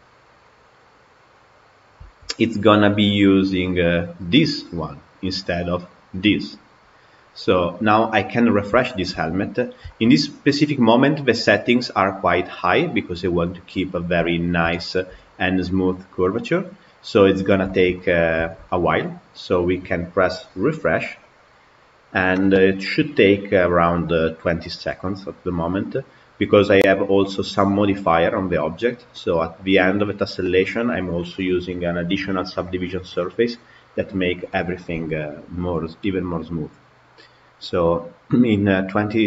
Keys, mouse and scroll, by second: 0.3-0.9 drag, 2.2 Tab, 3.9 click, 6.0 click, 7.6 click, 8.3 scroll up 2, 8.7-9.3 shift+middle drag, 9.3-9.8 scroll up 4, 9.8-12.8 shift+middle drag, 13.3-15.0 middle drag, 15.0 KP_Decimal, 15.8-21.1 middle drag, 21.1-39.2 drag.